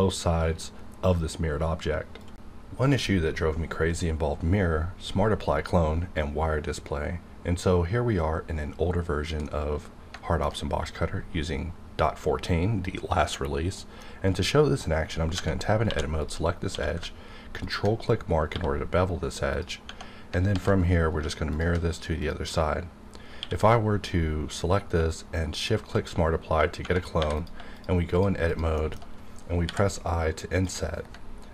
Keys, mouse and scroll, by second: 10.1 alt+Num_Lock, 10.7 q, 13.8 middle click, 15.4 Tab, 15.8 2, 16.1 click, 16.7 q, 17.6 ctrl+click, 18.5 1, 18.7 scroll up 1, 20.4 alt+x, 21.5 shift+click, 22.2 click, 23.4 q, 25.5 shift+click, 26.3-26.8 scroll up 2, 26.8 Tab, 27.1 3, 27.4 click, 27.7 shift+click, 28.8 shift+middle click, 28.9 shift+scroll down 1, 29.6 i, 30.5 click.